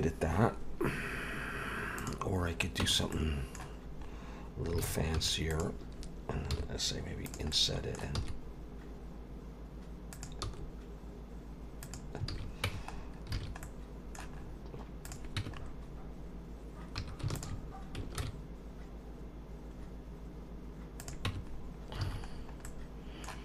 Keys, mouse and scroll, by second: 0.9 scroll up 2, 1.5 scroll down 1, 2.0 click, 2.4-2.8 scroll up 3, 2.8 Tab, 3.1 middle click, 4.1-4.7 scroll up 2, 4.8 alt+a, 5.2 3, 5.5 click, 6.5 i, 7.5 middle click, 8.2 e, 10.4 s, 12.3 alt+a, 12.7 Tab, 12.9 scroll down 4, 13.3 alt+a, 13.6 middle click, 14.4-15.0 scroll up 4, 15.0 click, 15.4 Tab, 15.5-17.0 scroll up 3, 17.0 2, 17.3 alt+shift+click, 18.2 ctrl+b, 21.3 Tab, 21.5-22.0 scroll down 3, 22.0 alt+a, 22.3-22.6 scroll down 2, 22.6 middle click.